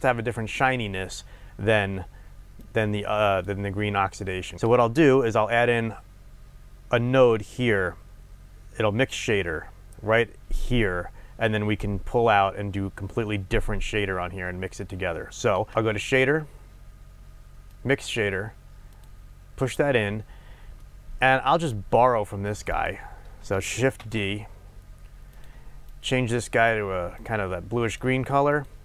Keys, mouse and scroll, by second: 2.6 click, 4.5 middle click, 15.7 shift+a, 19.0 click, 20.3 scroll down 1, 21.8-22.8 middle drag, 21.8-22.8 scroll up 2, 22.8 click, 24.0 shift+d, 25.9 click.